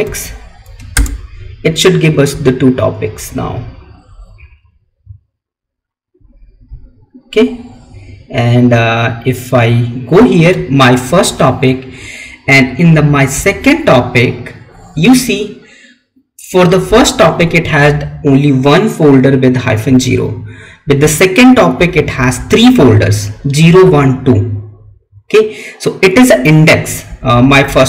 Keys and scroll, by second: 20.7 Down, 26.9 Up, 27.5 Right.